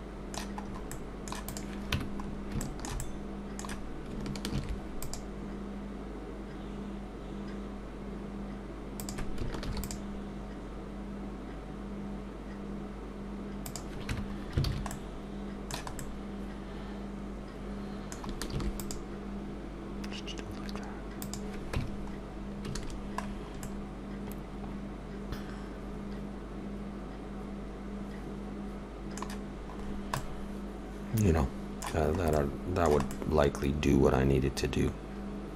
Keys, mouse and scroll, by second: 0.7-1.1 scroll up 2, 0.9 middle click, 1.4 click, 2.0 Tab, 2.2 scroll up 2, 2.6 shift+middle click, 3.0 middle click, 4.6 ctrl+r, 14.1 Tab, 14.4-14.9 scroll down 3, 14.7 alt+a, 14.9 middle click, 18.5 ctrl+r, 21.8 Tab, 22.3-24.0 scroll down 5, 22.8 alt+a, 23.6 middle click, 29.4 scroll down 1, 30.2 middle click, 30.2 scroll down 4, 32.1-32.4 scroll up 2, 32.3 middle click.